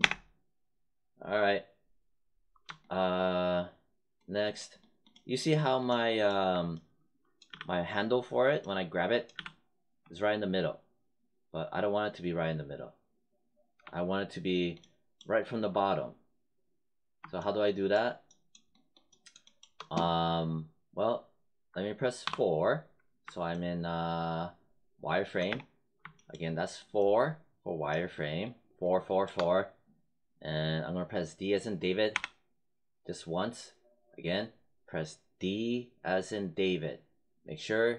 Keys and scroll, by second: 7.4 z, 9.2 z, 22.2 4, 25.4 space, 32.0 d.